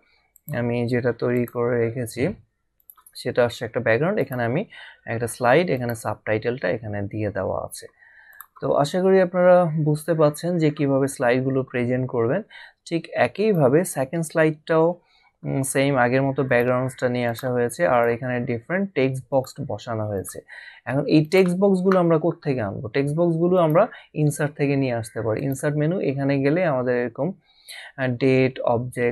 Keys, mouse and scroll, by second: 0.4 click, 1.6 click, 4.2 click, 5.8 click, 13.4 click, 16.4 click, 23.6 click, 25.4 click.